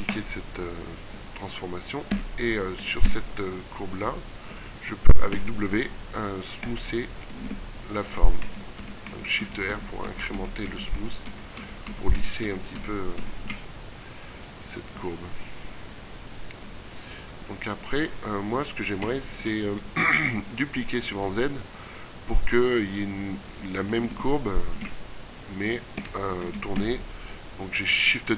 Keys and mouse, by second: 1.9 a, 4.5 w, 7.1 shift+r, 8.4-13.1 typing, 14.5 middle click, 23.5 shift+d, 26.5 r.